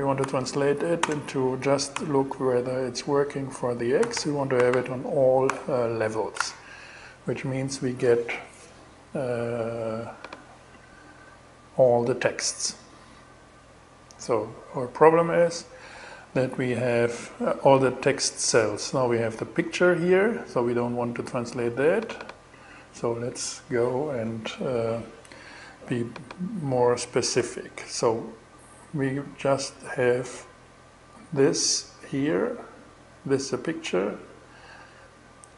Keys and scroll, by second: 0.0-2.1 typing, 3.3-4.7 typing, 4.9 alt+6, 5.8 alt+shift+6, 6.1 shift+Return.